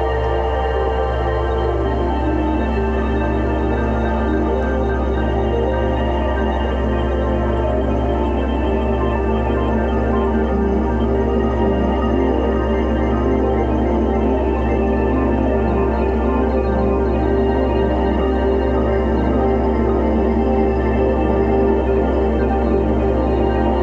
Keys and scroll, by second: 1.8 1, 2.2 2, 3.0 3, 14.5 ctrl+t.